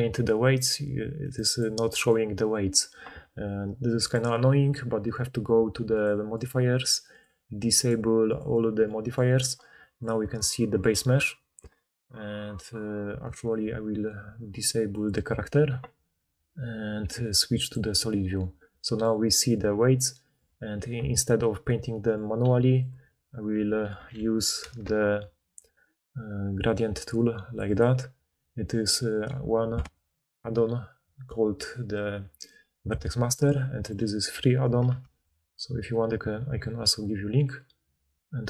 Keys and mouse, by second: 0.8-4.0 drag, 4.0-5.0 middle drag, 5.0-6.4 drag, 6.4-8.8 middle drag, 8.8-15.0 drag, 15.0-17.5 middle drag, 17.5 click, 17.7-23.0 middle drag, 22.6 f, 24.0 KP_3, 24.6 ctrl+d, 24.8-33.3 middle drag, 33.3-35.1 drag, 35.0 ctrl+d, 37.5-38.4 drag.